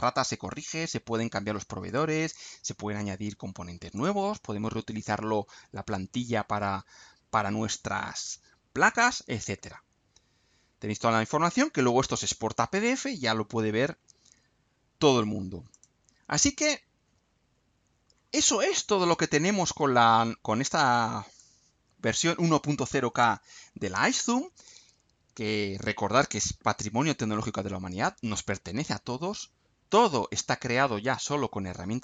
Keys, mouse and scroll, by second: 0.5 click, 1.9 click, 3.9 click, 4.5-5.1 scroll up 2, 10.7 scroll down 2, 11.0-11.6 scroll up 2, 15.7 click, 18.1-18.8 scroll up 2, 19.4-21.5 drag.